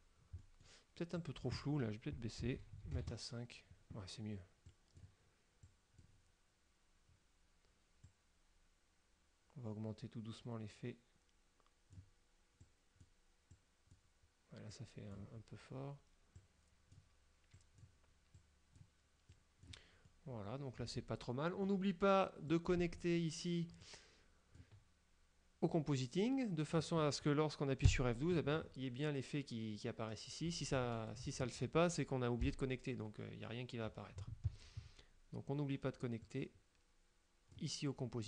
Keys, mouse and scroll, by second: 0.5 click, 1.3 click, 3.0 KP_5, 3.1 KP_Enter, 4.8 click, 5.8 click, 8.1-12.3 drag, 12.8 click, 13.6 click, 14.8 click, 16.5 click, 17.6 click, 18.5 click, 19.4 click, 20.1-21.9 middle drag, 22.6 click, 23.9 click, 25.8-27.1 drag, 28.0 F12, 30.9 ctrl+click, 32.5 F12, 36.4-37.8 drag.